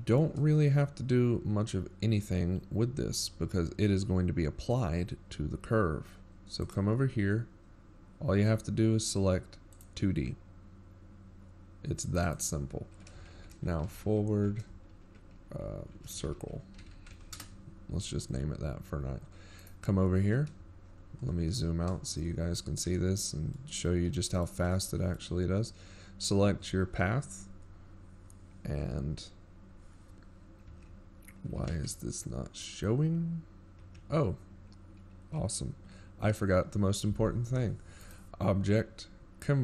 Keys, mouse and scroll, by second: 3.6 click, 4.5-6.1 scroll down 2, 6.3 shift+middle click, 7.4-7.9 scroll up 7, 13.6 click, 16.8 click, 19.1 click, 26.8 right click, 27.3-27.8 scroll down 10, 28.0-28.5 shift+scroll up 1, 28.7 shift+scroll up 15, 28.8-29.3 scroll down 4, 29.3 shift+scroll up 1, 29.9 shift+scroll up 1, 30.3 scroll down 1, 30.8 shift+middle click, 32.0 middle click.